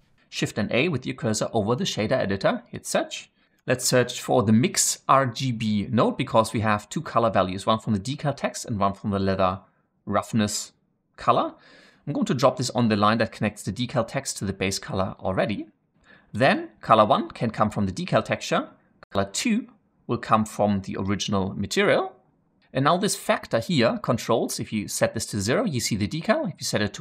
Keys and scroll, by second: 1.7 shift+a, 3.5 typing.